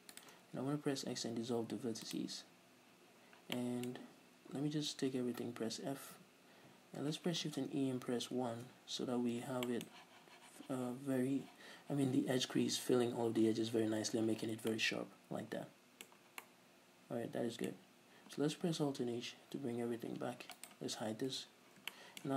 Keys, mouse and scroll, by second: 0.3 shift+right click, 1.2 x, 3.4 scroll down 2, 3.7-20.7 middle drag, 5.3 a, 6.4 f, 7.6 shift+e, 8.8 Return, 11.5-12.9 scroll up 2, 12.9-13.5 scroll up 1, 13.5-13.8 scroll up 1, 13.8 Tab, 20.2 alt+h, 20.7 right click, 21.5 h, 21.7 scroll down 2, 22.1-22.3 shift+middle drag.